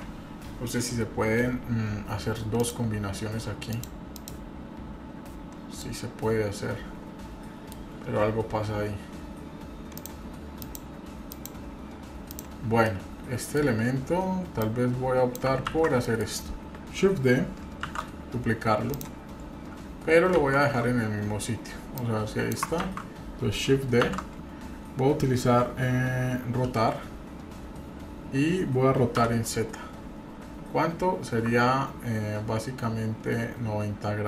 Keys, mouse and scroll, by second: 2.7 click, 3.8 click, 4.4 click, 5.8-7.7 middle drag, 10.0 click, 10.6 click, 11.3 click, 12.3 click, 12.8-13.6 middle drag, 14.6 click, 15.7 ctrl+z, 16.0 middle click, 17.8 shift+d, 20.4 ctrl+z, 22.0 click, 22.9 ctrl+z, 24.0 shift+d.